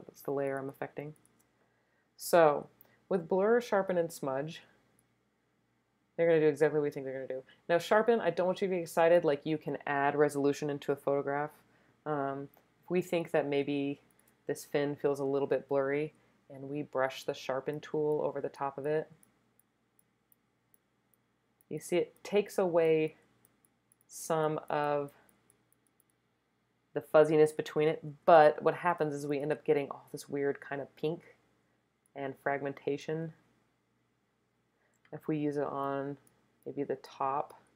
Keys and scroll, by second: 0.6 space, 1.1 space, 13.1 super+space, 14.0 space, 28.3 super+space, 28.9 space, 29.6 space.